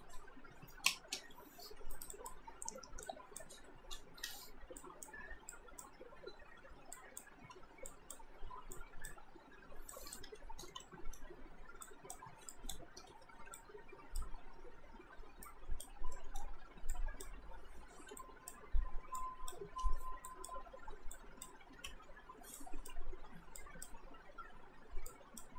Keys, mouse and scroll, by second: 0.9 space, 2.0 alt+right click, 2.2 alt+click, 4.3 Return, 4.8 click, 7.5 Return, 7.9 click, 10.3 Return, 10.8 alt+middle click, 11.9 click, 13.0 Return, 13.6 alt+click, 15.5 alt+right click, 16.1 alt+middle click, 16.9 click, 19.7 Return, 20.3 alt+click, 21.9 ctrl+z, 22.6 click.